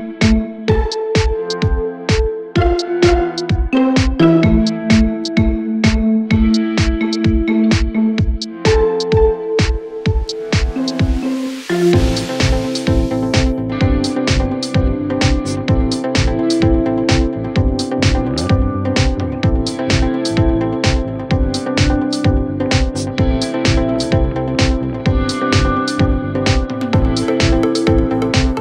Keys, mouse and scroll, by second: 0.0-0.2 typing, 0.2 shift+click, 0.3 shift+click, 0.7 shift+click, 0.8 scroll down 1, 1.3 shift+click, 1.4 shift+click, 1.9 m, 3.7-4.7 typing, 5.2 scroll up 1, 5.6 middle click, 6.8 space, 7.8 Delete, 7.9 middle click, 10.2 Delete, 11.4 Delete, 12.2 Delete, 12.6 Delete, 13.4 Delete, 13.4 middle click, 14.1 scroll up 7, 14.4-15.1 scroll down 11, 15.1 middle click, 16.4 double click, 17.2 scroll up 3, 17.8 typing, 18.9 middle click, 19.1 space, 19.4 right click, 21.3-22.2 typing, 21.9-22.2 scroll down 5, 23.1 middle click, 23.6-24.2 scroll up 17, 24.0 middle click, 24.5 e, 25.9 scroll down 3, 26.1 scroll up 3, 27.9 scroll down 1, 28.2 e, 28.5 scroll down 7.